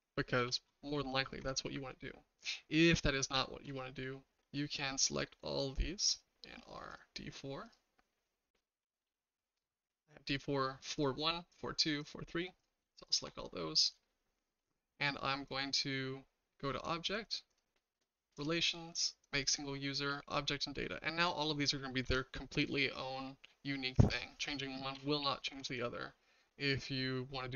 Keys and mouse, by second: 0.4 BackSpace, 0.9 KP_4, 1.4 Tab, 2.0-3.6 shift+middle drag, 14.0-14.5 shift+middle drag, 15.6-16.8 drag, 17.6-21.0 drag, 22.0 Tab, 22.7-24.1 shift+middle drag, 24.8 typing, 25.5 Tab, 25.8-27.5 shift+middle drag.